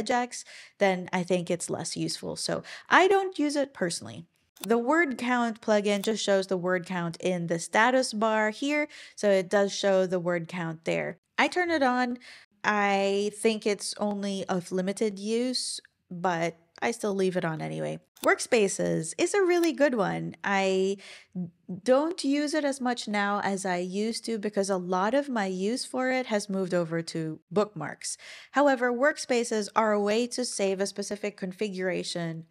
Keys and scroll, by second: 30.5 Escape.